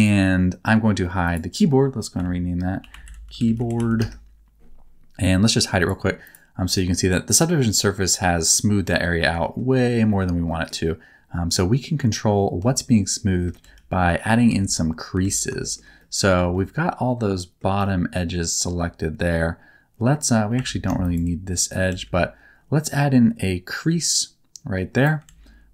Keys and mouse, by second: 1.2 right click, 2.1 F2, 6.7-7.8 middle drag, 8.3 middle click, 9.4 shift+middle click, 9.9 middle click, 10.4 middle click, 12.5 Tab, 13.6 alt+z, 14.4 3, 15.2 alt+z, 15.6 shift+middle click, 15.9 middle click, 16.3 alt+z, 16.5-17.5 middle drag, 17.8 middle click, 20.5 2, 21.0 shift+click, 21.8 alt+z, 24.1 click, 25.2 alt+z.